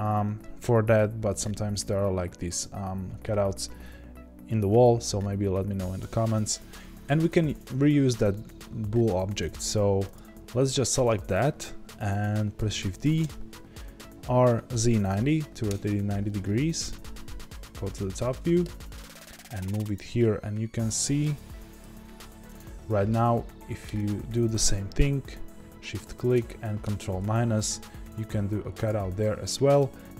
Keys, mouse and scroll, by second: 10.1 click, 12.7 shift+d, 13.9 r, 15.7 KP_Enter, 16.8 KP_7, 18.6 g, 19.9 click, 20.0 scroll up 1, 20.1-22.5 middle drag, 21.8 g, 22.5 click, 24.0 shift+click, 26.8 ctrl+KP_Subtract, 28.8 click, 29.2-30.1 middle drag.